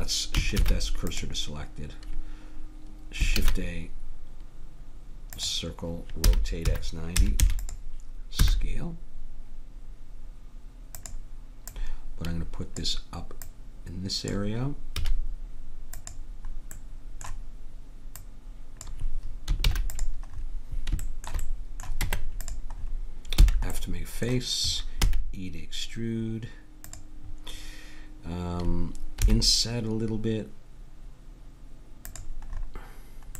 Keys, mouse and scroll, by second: 0.6 shift+s, 3.4 shift+a, 6.2 r, 8.4 s, 11.7-15.2 drag, 15.0 s, 16.7 middle click, 18.1-19.7 drag, 19.7 ctrl+a, 22.0 Tab, 23.4 f, 24.0 middle click, 25.0 e, 29.2 i, 32.5-33.3 middle drag.